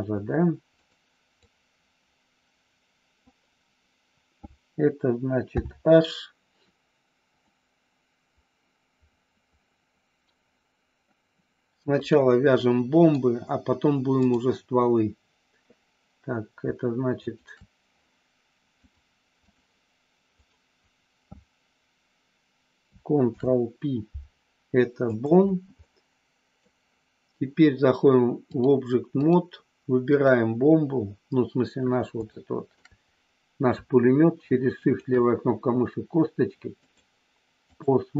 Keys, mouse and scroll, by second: 0.8 click, 1.3-3.3 drag, 5.4 h, 7.3-10.2 middle drag, 12.0 click, 12.6 middle click, 14.2-15.7 drag, 18.8 click, 20.3 click, 23.2 ctrl+p, 25.8 middle click, 28.6 click, 32.3 shift+middle click, 34.8 shift+click, 36.8-37.8 drag.